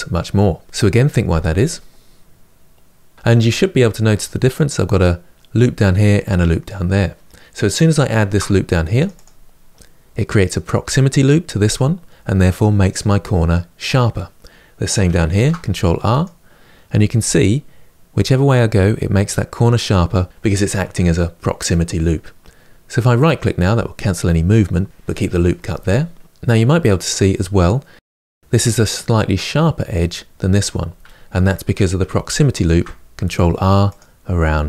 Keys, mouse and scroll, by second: 8.0 ctrl+r, 15.0 ctrl+r, 27.0-32.4 middle drag, 32.4 ctrl+r.